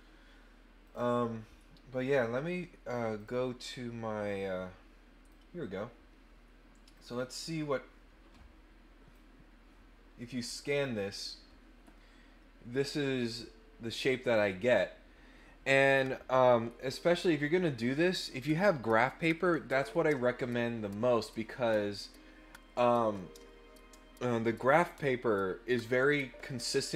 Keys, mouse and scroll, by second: 0.8 click, 3.1 click, 4.2-5.2 drag, 6.9 click, 7.1 click, 9.1-10.8 drag.